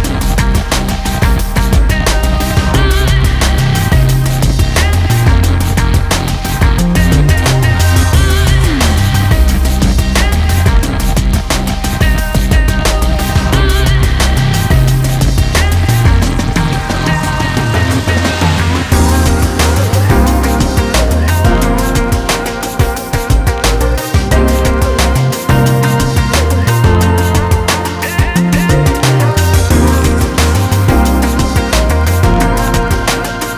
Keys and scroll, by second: 2.4 ctrl+Return, 13.2 shift+F6, 17.5-18.8 typing.